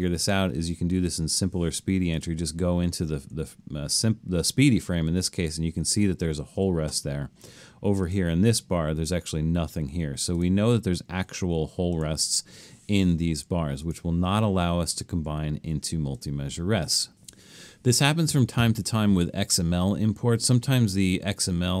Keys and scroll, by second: 3.0 Right, 3.4 Right, 6.4 Down, 6.6 Down, 12.7 Escape.